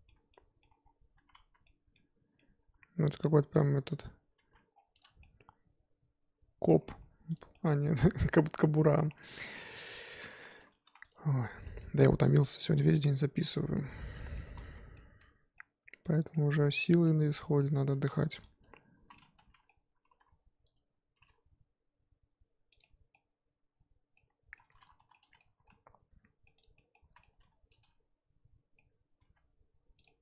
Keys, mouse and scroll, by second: 0.8-1.1 scroll down 2, 1.1 Tab, 1.5 z, 1.6-4.4 middle drag, 4.4 alt+h, 4.7 scroll down 4, 4.9 click, 5.2-6.8 middle drag, 6.8 scroll up 3, 7.3 click, 7.5-8.9 middle drag, 8.9 scroll up 1, 9.1-9.6 middle drag, 9.6 Tab, 9.8 middle click, 10.1 z, 11.6 z, 11.8-12.2 middle drag, 12.2 click, 12.5 middle click, 13.4 z, 13.5-14.4 middle drag, 14.4 z, 14.9-16.1 middle drag, 16.1 ctrl+click, 16.3-18.1 middle drag, 18.1 1, 18.6 ctrl+Left, 19.0 z, 19.1 middle click, 20.1 g, 21.2 g, 22.8-25.6 middle drag, 25.6 z, 26.1-26.6 middle drag, 26.6 click, 26.8 middle drag, 27.0 z, 27.2-29.2 middle drag, 29.2 g, 30.1-30.2 middle drag.